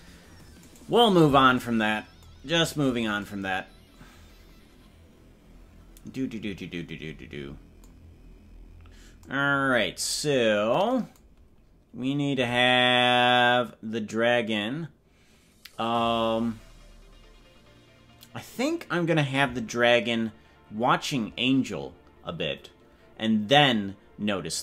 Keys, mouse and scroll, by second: 0.9-1.5 right drag, 2.5-3.0 scroll down 6.